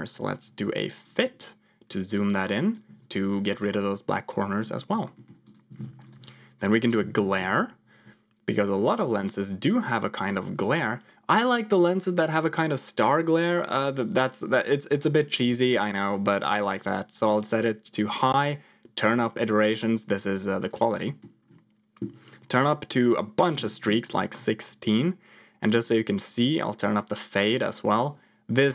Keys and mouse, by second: 1.1 click, 2.0 click, 4.2 click, 5.0 middle click, 5.3 click, 5.6 shift+a, 16.5 click, 18.0 click, 19.2 middle click, 19.8 click, 22.2-24.0 drag, 25.7-28.0 drag.